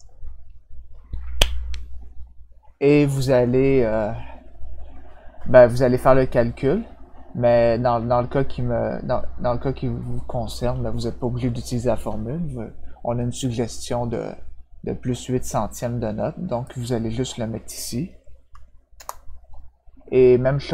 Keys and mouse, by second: 16.6 click, 18.9 Return.